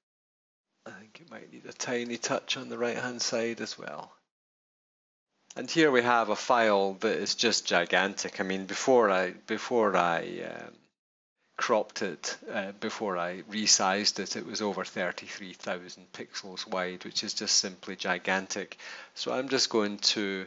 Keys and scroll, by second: 5.4 Return, 8.9 super+=, 10.2 super+-.